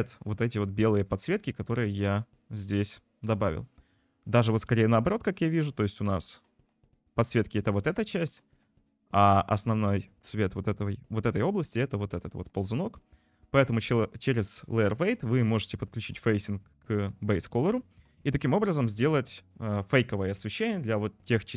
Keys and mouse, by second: 5.3 click, 8.7 click, 9.2 click, 14.9 click, 15.4 click, 16.0 click, 18.0 click.